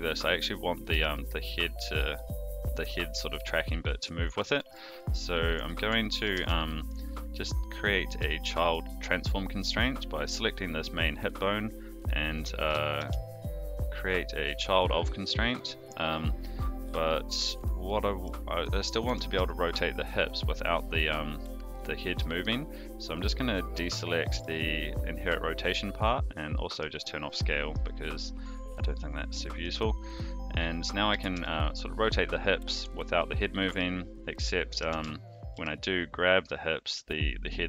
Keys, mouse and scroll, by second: 0.6 click, 0.9 g, 4.5 alt+g, 5.5 a, 6.1 alt+g, 6.3 alt+r, 6.8 click, 8.6 shift+click, 13.0 ctrl+shift+c, 17.8-18.3 middle drag, 18.8 click, 19.0 r, 22.4 click, 23.7-24.5 drag, 26.4-26.8 drag, 27.3-27.7 drag, 28.2-29.6 middle drag, 30.2 click, 30.6 middle drag, 31.1 r, 33.5 middle drag, 34.7 alt+g, 34.9 alt+r, 35.5 g.